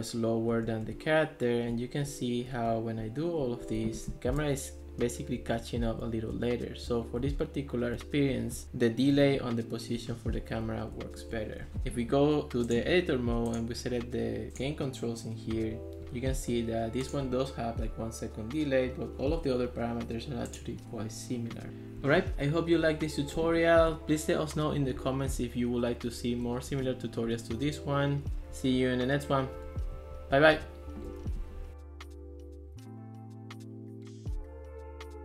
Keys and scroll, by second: 0.0-0.9 typing, 3.1 d, 3.7 a, 5.3-10.2 typing, 21.8-25.5 typing, 26.8 d, 27.7 a, 28.4 d, 28.8 a, 30.0 d, 30.7 a.